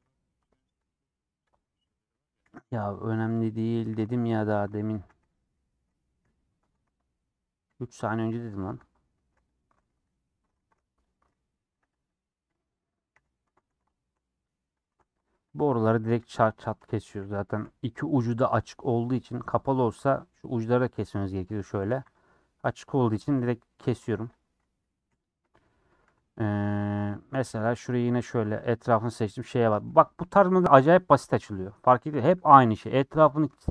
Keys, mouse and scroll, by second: 0.0 h, 1.5 click, 2.4 /, 2.7 middle click, 3.0 scroll down 1, 3.1 Tab, 3.4 middle click, 3.8 2, 4.3 alt+click, 4.9 a, 5.2 u, 6.2 /, 6.6 Tab, 6.8 h, 7.8 click, 8.2 /, 8.6 Tab, 8.8 middle click, 9.1 2, 9.5 alt+click, 10.5 ctrl+z, 11.1 alt+click, 11.6 a, 12.1 u, 13.1 /, 13.4 Tab, 13.6 h, 13.9 shift+middle click, 14.8 click, 14.8 Tab, 15.5 alt+click, 17.6 /, 18.6 Left, 19.5 Left, 19.7 Left, 19.7 click, 21.1 Left, 21.7 a, 22.0 u, 23.3 /, 23.8 Tab, 24.1 h, 24.2 click, 25.0 /, 25.3 middle click, 25.8 Tab, 26.0 3, 27.7 alt+Left, 28.2 alt+Left, 29.1 ;, 29.5-32.6 middle drag, 32.6 click, 32.8 middle click.